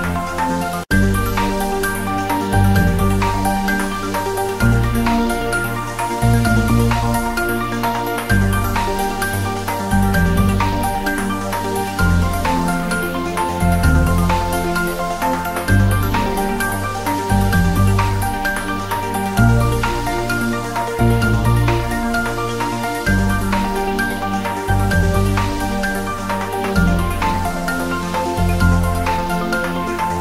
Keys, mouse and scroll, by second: 0.1 click, 1.1-1.8 scroll up 1, 3.5-3.8 scroll down 1, 4.4 click, 4.9 shift+d, 6.3 click, 6.5-7.1 scroll up 1, 8.2-8.6 scroll up 1, 8.6 r, 9.4 click, 9.8 g, 13.8 click, 14.4 scroll up 1, 14.7 s, 16.8 click, 17.0-17.4 scroll up 1, 17.4 g, 18.1 Right, 18.8 Return, 19.0 scroll down 1, 19.6-20.9 drag, 21.5-24.1 typing, 22.8 click, 23.0 ctrl+z, 25.1 click, 25.7 g, 26.0 Left, 28.4 Return, 29.2 r.